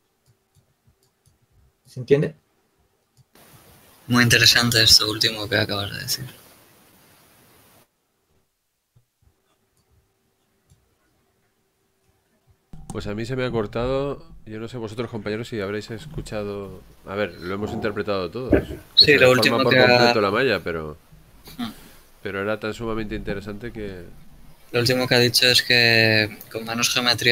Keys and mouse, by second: 5.3-6.8 drag, 6.8 middle click, 10.2-12.5 middle drag, 21.3-27.3 drag.